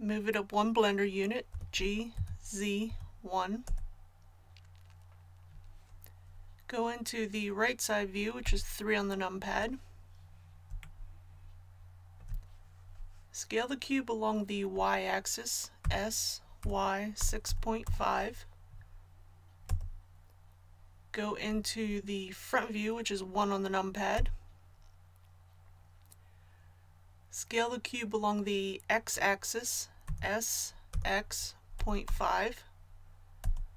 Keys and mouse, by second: 1.5 g, 8.4 KP_3, 15.8 s, 24.1 KP_1, 30.0 s.